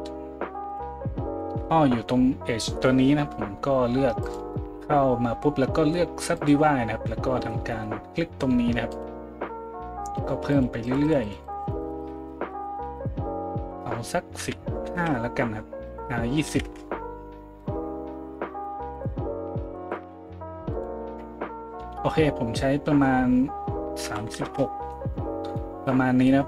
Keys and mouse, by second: 9.0-26.4 drag.